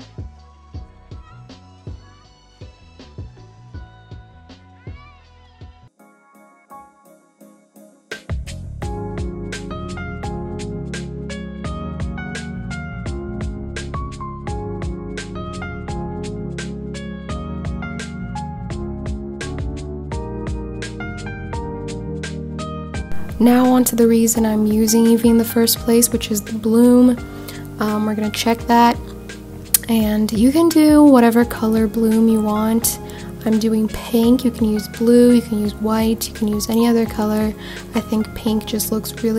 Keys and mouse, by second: 0.2 r, 2.3 click, 3.5 s, 4.4 click, 4.7 g, 6.4 shift+d, 7.4 click, 7.6 s, 8.9 click, 9.5 g, 11.2 click, 12.0 click, 12.7 shift+d, 15.4 click, 16.3 click, 16.9 shift+d, 19.2 click, 25.3 click, 26.3-29.5 drag, 31.1 click, 32.5 click, 38.3-39.3 shift+drag.